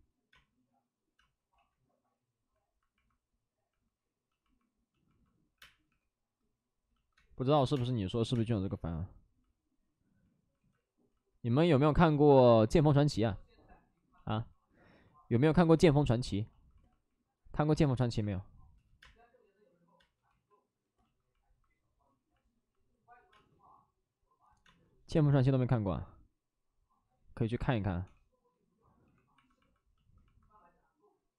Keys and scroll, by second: 1.1 space, 1.4 ctrl+z, 5.5 3, 5.8 space, 5.8 3, 6.9-7.8 typing, 10.3-11.0 typing, 18.9 1, 18.9 space, 19.9 space, 20.2 ctrl+z, 23.2 space, 24.6 space, 26.0 space, 27.7 space, 28.0 3, 29.0 2.